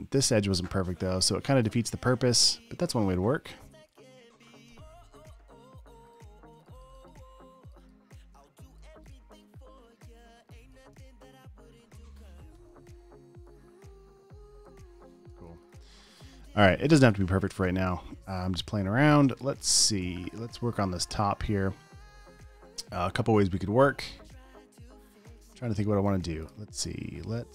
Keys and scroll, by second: 3.2 super+space, 5.1 alt+super+b, 6.8 super+space, 8.6 space, 11.4 super+z, 12.2-13.4 typing, 15.4 space, 16.0 alt+super+space, 16.7 space, 17.7 super+space, 18.3 v, 18.5 space, 19.2 space, 19.4 space.